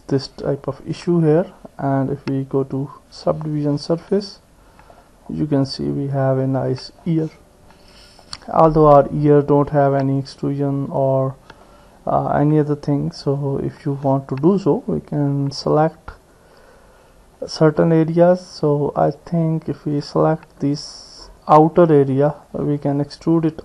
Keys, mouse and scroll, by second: 0.7 click, 1.5 middle click, 3.9 Tab, 4.2 middle click, 5.7-7.0 middle drag, 10.2 click, 10.9 Tab, 11.6-12.7 middle drag, 12.7 click, 14.7 click, 15.5 middle click, 17.7 click, 22.3 ctrl+click, 22.9 middle click, 23.3-23.6 drag.